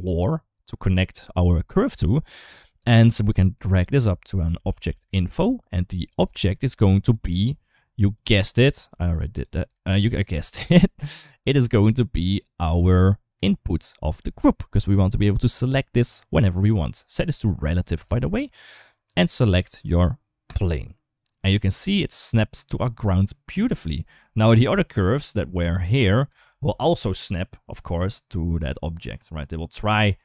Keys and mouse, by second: 1.7 Tab, 2.6 middle click, 3.5-5.9 drag, 6.1 shift+middle click, 6.7 click, 7.9 click, 9.1 click, 11.3 click, 11.5-13.5 drag, 16.9 middle click, 17.8 click, 21.2-23.7 middle drag, 23.9 shift+middle click, 24.5 Tab, 25.2 Tab, 25.6 d, 25.7 click, 26.3 ctrl+z.